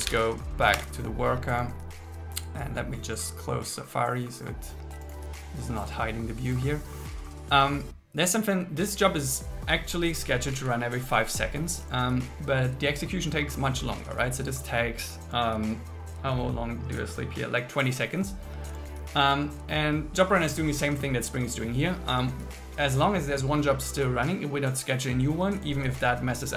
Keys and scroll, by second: 0.8 Return, 10.5 Right.